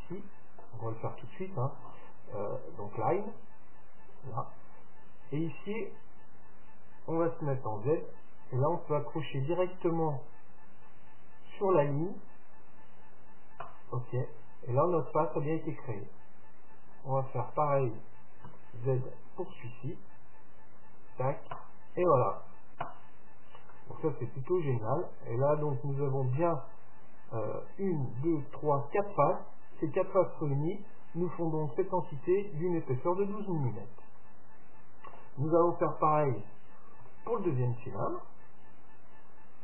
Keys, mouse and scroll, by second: 0.2-2.1 middle drag, 1.8-2.8 scroll up 1, 2.8-4.6 drag, 23.2 middle click, 23.4-23.8 scroll up 1, 23.8-25.8 middle drag, 33.7-35.6 middle drag, 37.1 KP_7, 38.3-39.6 middle drag.